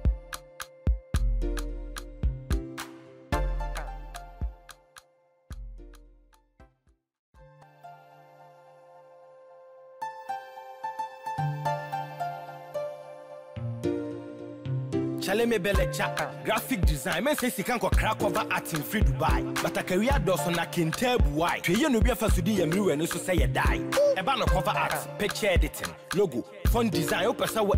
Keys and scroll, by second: 15.5 ctrl+-, 21.4 ctrl+0, 21.7 ctrl+-.